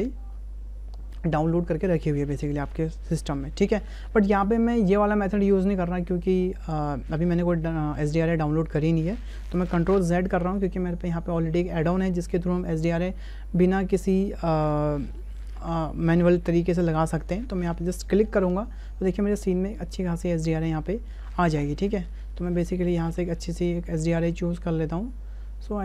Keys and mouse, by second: 10.0 ctrl+z, 13.7 click, 18.6 click, 22.0-22.3 drag, 23.1-25.8 drag.